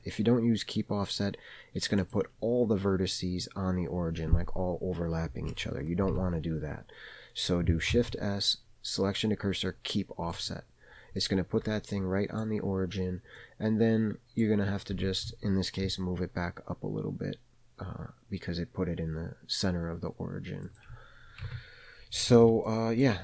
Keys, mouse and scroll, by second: 6.1 ctrl+z, 7.9 shift+s, 11.9 middle click, 12.6-13.1 scroll up 1, 13.1 scroll up 1, 13.3-14.4 middle drag, 14.9 g, 21.4 Tab, 22.3 alt+a, 22.6 middle click, 23.0-23.2 scroll down 2.